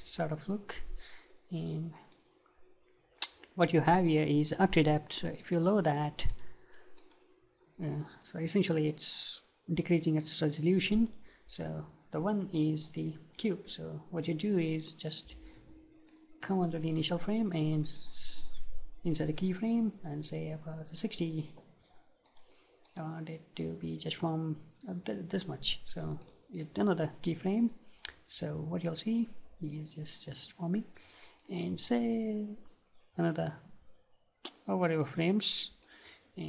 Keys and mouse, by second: 0.2-2.1 middle drag, 5.9-13.1 drag, 13.1-15.2 middle drag, 14.7-22.3 right drag, 22.3-24.6 drag, 25.9-36.4 right drag.